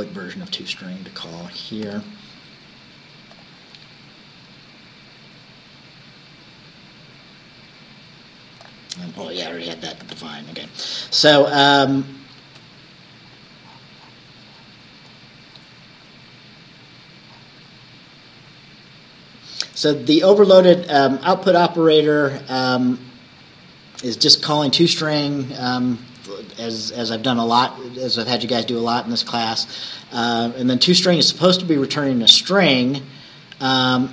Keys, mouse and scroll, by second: 0.5-1.5 drag, 1.9 ctrl+c, 3.4 click, 8.7 click, 9.4 ctrl+click, 10.1 ctrl+s, 11.5-11.8 scroll down 2, 12.4-12.8 scroll down 2, 13.2-13.5 scroll down 2, 13.7-14.0 scroll down 2, 14.5-14.9 scroll down 2, 15.1-16.3 scroll down 6, 17.4-17.7 scroll down 2, 21.9 scroll down 2, 23.0-23.4 scroll down 2, 23.5 scroll down 2, 29.8-30.6 scroll up 2, 31.4 scroll down 1.